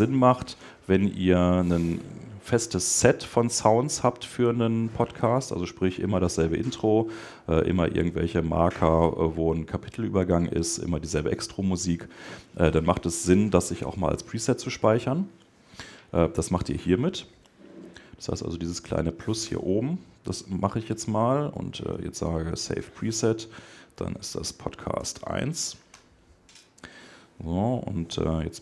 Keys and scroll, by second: 25.8 Return.